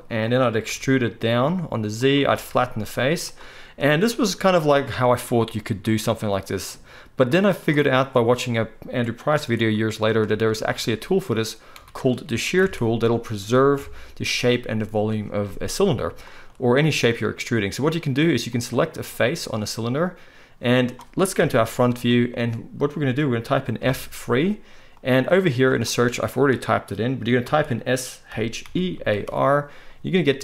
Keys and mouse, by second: 0.7 e, 2.3 s, 10.6 ctrl+z, 10.8 ctrl+z, 11.7 ctrl+z, 12.5 ctrl+z, 12.6 ctrl+middle click, 13.8-15.8 middle drag, 13.8 KP_1, 18.5 click, 21.4 KP_1, 21.9 shift+middle click, 23.8 F3, 24.6-30.4 middle drag.